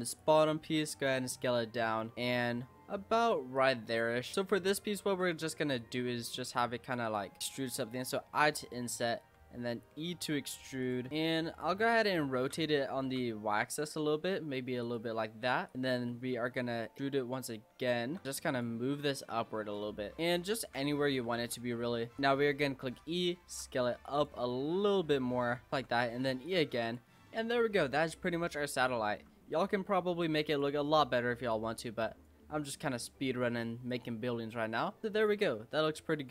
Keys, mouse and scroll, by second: 0.5 s, 1.3-2.1 scroll up 8, 1.5 middle click, 2.1-3.5 middle drag, 3.5 click, 4.3 middle click, 5.1 s, 6.4 middle click, 7.0 click, 7.3 middle click, 8.2 i, 9.3 e, 11.1 middle click, 11.3 e, 12.4 ctrl+z, 13.0 r, 15.7 click, 16.4 e, 17.9 shift+middle click, 18.2 click, 19.3 click, 20.2 r, 20.6 ctrl+z, 21.3 r, 22.2 shift+middle click, 22.9 e, 23.5 s, 24.4-25.5 scroll up 3, 24.4 middle click, 25.5 s, 25.7 e, 26.7 Tab, 26.8 click, 27.1 scroll down 3, 27.3-28.4 middle drag, 28.4 scroll down 1, 28.6-29.1 middle drag, 29.1-29.5 scroll down 3, 29.5-30.5 middle drag, 30.5 click, 30.8 scroll down 6, 30.9-31.5 scroll up 1, 31.5 click, 32.7 click, 33.9 click, 34.3-35.1 middle drag, 35.1 click, 35.7 click.